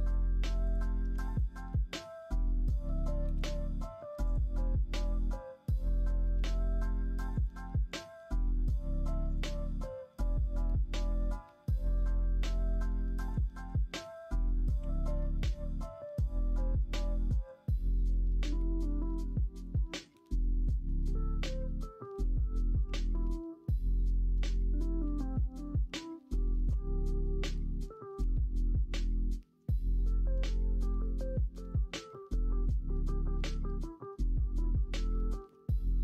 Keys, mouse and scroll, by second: 1.1 Tab, 5.2-6.4 middle drag, 9.6-11.1 middle drag, 12.6 middle click, 13.2 KP_1, 13.6 KP_3, 14.7 KP_9, 22.2 s, 28.1 g, 33.0 s, 34.4-34.9 middle drag, 35.1 middle drag, 35.8 KP_1.